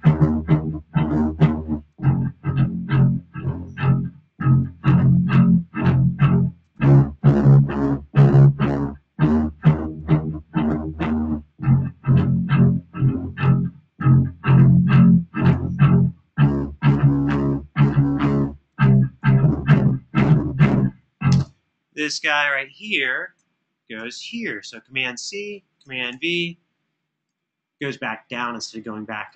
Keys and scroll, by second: 12.0 super+[, 12.3 super+[, 19.0 super+d, 20.6 super+z, 21.1 space, 23.7 super+c, 25.9 super+v, 29.2 space.